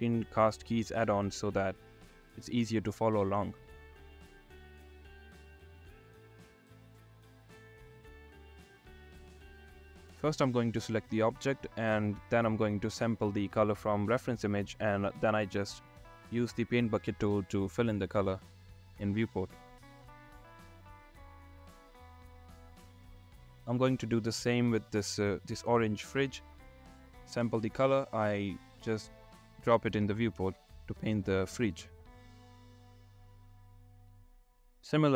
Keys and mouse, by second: 0.0 n, 1.5 click, 2.7 click, 6.3 click, 6.8 drag, 11.3 click, 14.2 middle click, 21.8-22.3 drag, 23.4-24.5 drag, 26.6 click, 27.4-28.5 drag, 30.6 shift+middle click, 33.4 click.